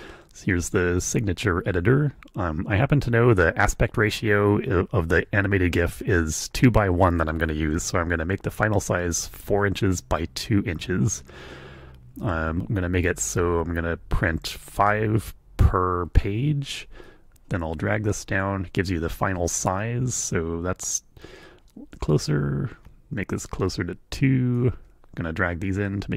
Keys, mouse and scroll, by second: 17.0-18.6 drag, 21.4-24.7 drag, 25.8-26.1 drag.